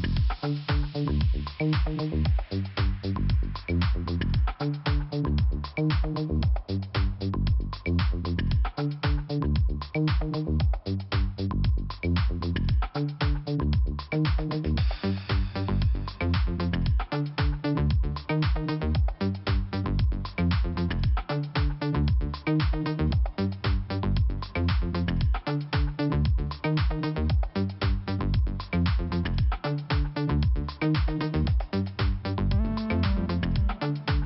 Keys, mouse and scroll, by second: 1.0-1.3 scroll down 2, 2.5 click, 3.0 click, 5.2 click, 8.1 click, 10.3 click, 10.4 click, 11.3 scroll down 1, 13.6 click, 13.7 click, 14.0 click, 14.1 click, 14.7 click, 16.3 click, 16.4 click, 17.9 click, 21.9 click, 21.9 click, 22.5 click, 25.9 click, 30.8 click, 30.9 click, 31.3 click, 31.4 double click, 32.2 double click, 33.5 click, 34.0 click, 34.1 click.